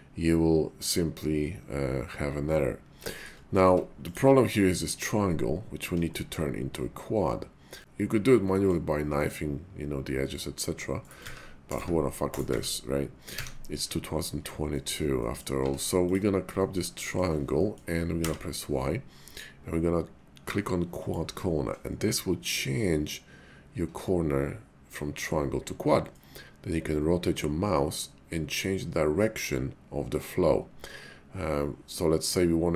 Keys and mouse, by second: 3.1 shift+middle click, 3.6 Tab, 4.0 click, 4.5-5.8 middle drag, 6.1 shift+middle click, 7.7 middle click, 8.5-13.4 middle drag, 14.2 middle click, 14.7 shift+middle click, 15.1 middle click, 15.6 Tab, 15.9 click, 16.6 shift+middle click, 16.9 middle click, 17.5 middle click, 18.1 y.